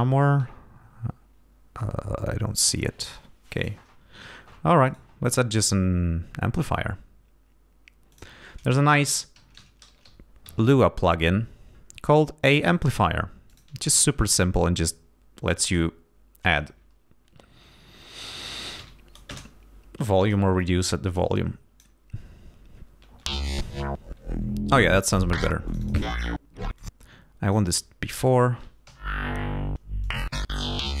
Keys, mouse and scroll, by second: 3.5 click, 4.9 right click, 8.1 click, 9.1-10.9 typing, 12.5 click, 13.5 click, 15.5 click, 18.5-19.3 typing, 20.2 click, 21.1 click, 23.2 space, 24.7 click, 25.7 click, 26.8 click, 28.8 l, 30.0-31.0 drag.